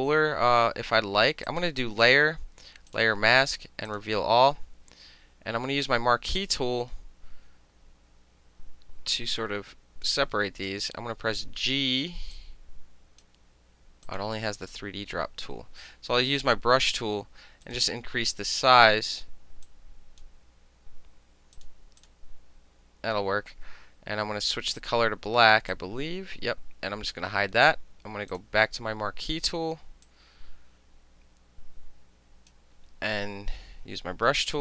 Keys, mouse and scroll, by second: 1.5 click, 2.9 click, 3.9 click, 5.3-6.4 middle drag, 6.4-10.1 drag, 10.1-12.4 middle drag, 10.7 g, 12.4 click, 13.3 middle click, 14.1 click, 14.2-15.6 middle drag, 16.4 b, 17.7 right click, 19.7-20.3 drag, 21.6 click, 22.0 click, 24.8 click, 25.8-27.1 drag, 28.4 click, 30.1-32.5 drag, 34.3 b.